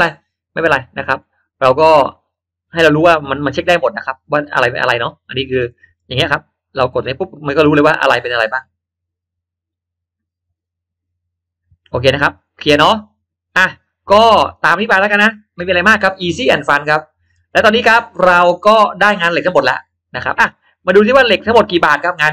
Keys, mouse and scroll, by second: 0.5-0.9 scroll down 1, 1.0-1.4 scroll up 1, 1.2-2.2 middle drag, 2.4 scroll down 1, 2.8 scroll up 1, 3.6 click, 4.6 scroll down 1, 5.6 middle click, 6.2-6.8 drag, 7.6 click, 12.5 middle click, 13.1 scroll down 1, 13.8 click, 14.4 click, 15.8 click, 16.6 click, 17.2 middle click, 17.7-18.8 middle drag, 19.0-19.4 scroll up 1, 19.1 middle click, 19.6-20.0 scroll down 1, 20.2 scroll up 1, 21.0-21.9 drag.